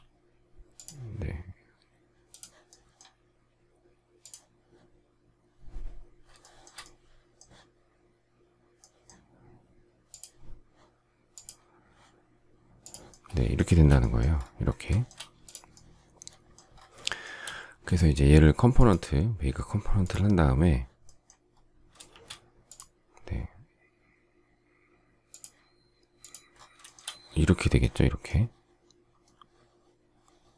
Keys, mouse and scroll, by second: 6.3 shift+middle click, 13.6 space, 14.8 shift+middle click, 17.0 shift+middle click, 22.0 shift+x, 26.7 shift+middle click.